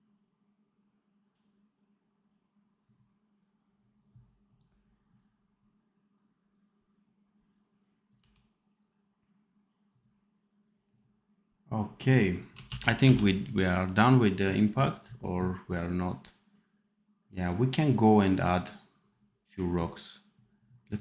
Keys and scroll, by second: 8.1 d, 12.6 ctrl+s, 13.0 d.